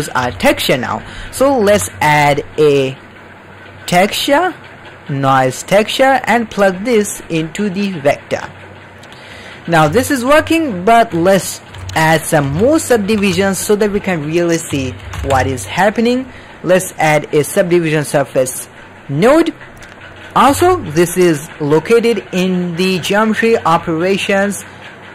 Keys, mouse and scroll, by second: 0.2 alt+a, 0.4 middle click, 1.1 middle click, 1.6 shift+a, 6.7-8.2 drag, 8.9 click, 9.5 middle click, 9.9-10.3 ctrl+middle drag, 10.8 ctrl+middle click, 11.5 middle drag, 11.7 alt+a, 11.9 drag, 12.4 g, 13.1 shift+a, 20.4 shift+a.